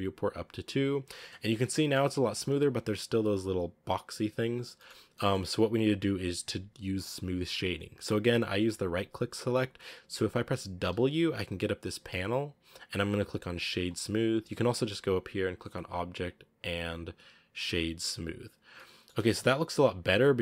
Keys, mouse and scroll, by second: 1.0-1.4 scroll up 3, 1.7 shift+middle click, 1.9 scroll up 1, 2.5-4.1 scroll up 1, 4.1-4.6 scroll down 7, 4.6 shift+middle drag, 4.8-5.2 scroll up 4, 5.0 middle drag, 8.2-9.9 scroll down 1, 18.6-20.4 middle drag.